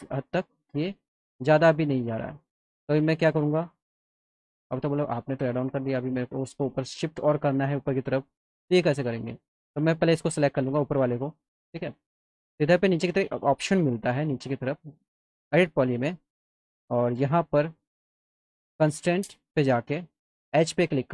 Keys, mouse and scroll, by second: 4.1 click, 4.9 alt+middle click, 8.4 click, 9.4 click, 9.6 click, 10.3 alt+middle click, 10.7 scroll up 2, 12.5 click, 14.0 click, 15.8 click, 17.7 click, 20.5 click.